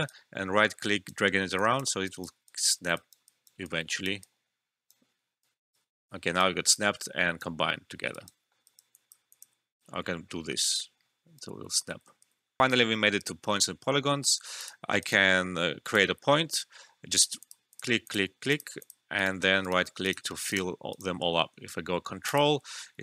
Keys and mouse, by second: 0.0-8.1 right drag, 6.3 typing, 8.0-8.9 typing, 8.4 alt+middle click, 8.6 alt+right click, 8.9 alt+click, 9.7-11.8 right drag, 11.8 ctrl+z, 12.6 alt+F12, 14.5 click, 15.0 right click, 15.8 click, 19.1 right click, 22.2 ctrl+click, 22.6 typing.